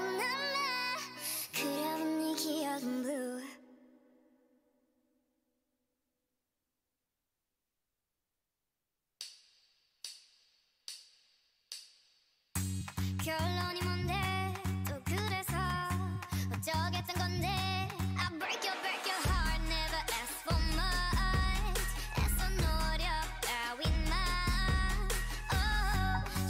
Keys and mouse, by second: 1.3-2.5 drag, 2.8 KP_1, 3.4 z, 3.8 b, 4.7 z, 7.6 c, 10.3 c, 13.7-15.5 drag, 14.2 c, 16.2-18.0 drag, 17.0 c, 21.5-23.5 right drag, 22.5-23.8 drag, 23.6 z, 23.8 a.